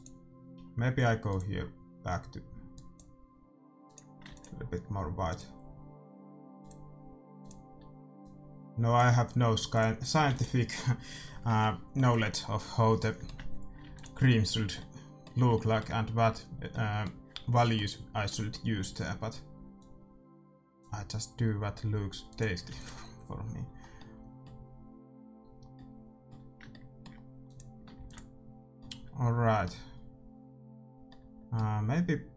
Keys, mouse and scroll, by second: 3.9-7.0 drag, 4.3 ctrl+s, 7.6-11.5 drag, 10.3 ctrl+s, 11.7-14.9 middle drag, 13.9 ctrl+s, 19.7-21.5 drag, 22.3-24.1 drag, 22.7 ctrl+s, 23.8-26.2 middle drag, 27.5-29.4 drag, 28.0 ctrl+s, 32.0 middle click.